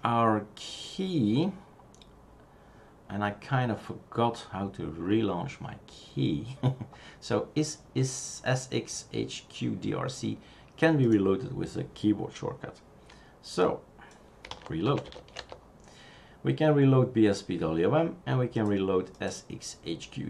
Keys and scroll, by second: 14.2-15.9 typing.